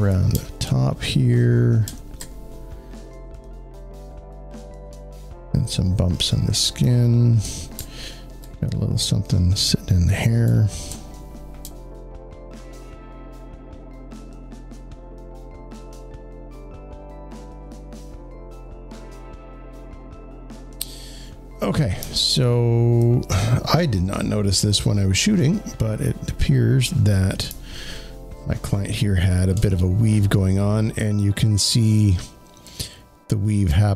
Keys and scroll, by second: 6.7 space, 6.8 space, 19.0 alt+space, 27.3 space, 27.6 space.